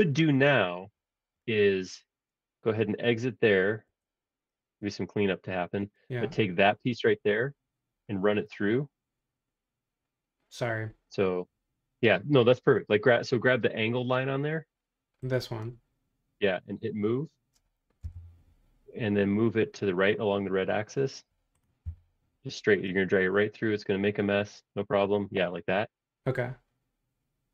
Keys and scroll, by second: 3.8 Escape, 18.0 m, 21.8 Right.